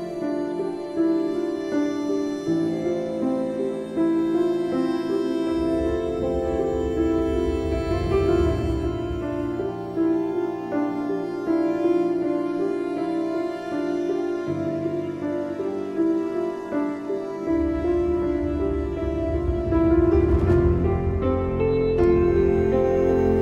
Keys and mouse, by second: 5.8 click, 6.6 ctrl+=, 9.8 click, 13.5 click, 14.7 click, 15.6 click, 16.9 click, 17.6 click, 18.3 click, 19.6 click, 20.0 click, 21.3 click, 22.2 click.